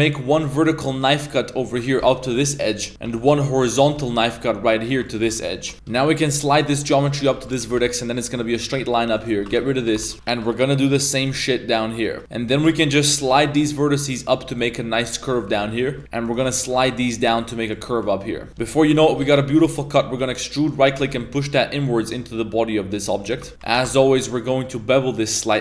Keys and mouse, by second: 7.0 right click, 7.0 g, 7.7 g, 7.7 a, 8.1 shift+w, 9.2 right click, 9.5 g, 9.9 a, 10.1 Tab, 10.4 a, 10.8 k, 12.2 1, 12.2 g, 12.9 g, 15.8 shift+middle click, 16.0 shift+Tab, 16.3 shift+right click, 16.6 g, 18.4 Tab, 18.8 KP_3, 18.9 middle click, 19.2 shift+s, 19.7 shift+middle click, 20.5 e, 21.0 g, 23.5 Tab, 23.7 ctrl+b.